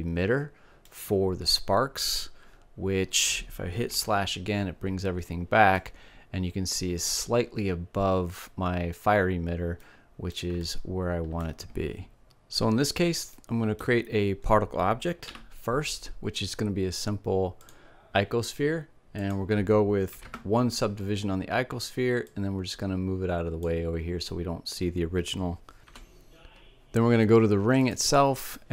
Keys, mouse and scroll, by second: 3.2 KP_Divide, 4.6-6.4 middle drag, 9.1-11.6 middle drag, 11.6 KP_Divide, 12.7-14.7 middle drag, 14.7 shift+a, 18.6-20.3 drag, 21.6-23.6 drag, 27.4-28.7 drag.